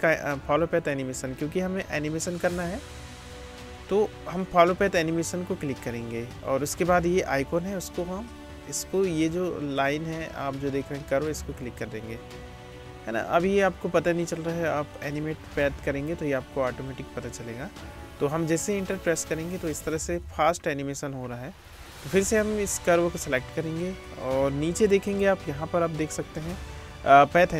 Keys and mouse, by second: 7.2-15.1 drag, 15.1-20.2 middle drag, 18.8 space, 20.2 space, 22.3-23.9 drag, 23.9 middle click, 24.1-27.2 drag, 27.2-27.5 middle drag.